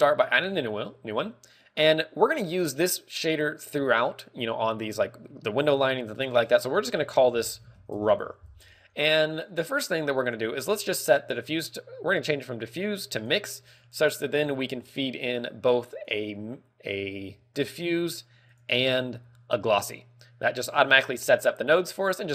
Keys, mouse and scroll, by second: 0.6 click, 3.1 click, 11.5 click, 16.4 click, 18.2 click, 19.0 click, 21.4 click.